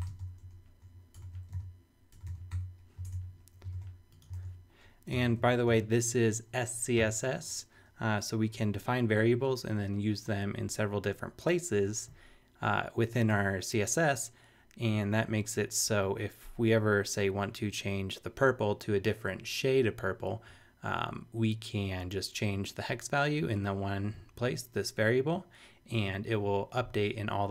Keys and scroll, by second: 0.0-2.1 typing, 2.3 super+v, 2.5 super+;, 3.0 super+Tab, 3.6 shift+super+Tab, 3.7 shift+super+e, 4.3 shift+super+Tab, 4.8 super+Tab, 5.1 super+Return, 5.7 shift+4.